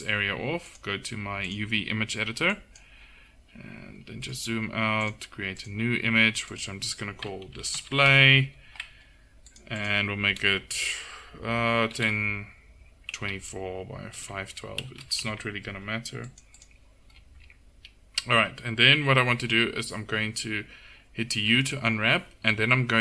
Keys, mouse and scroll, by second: 17.7-21.4 drag, 21.4 u.